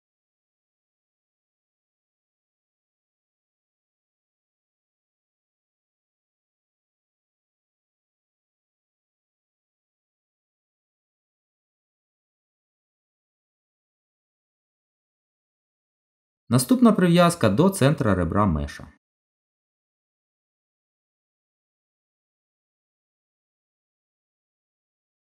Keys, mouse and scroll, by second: 1.7 middle click, 4.6 ctrl+z, 7.8 z, 10.5 Tab, 10.9 middle click, 14.7 middle click, 16.8 click, 19.7 middle click, 22.7 g.